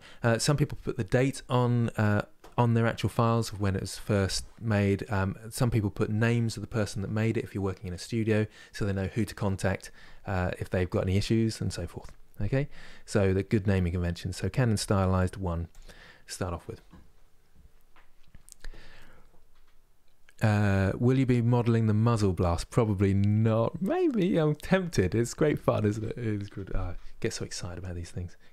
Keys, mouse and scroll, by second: 21.2-28.5 middle drag.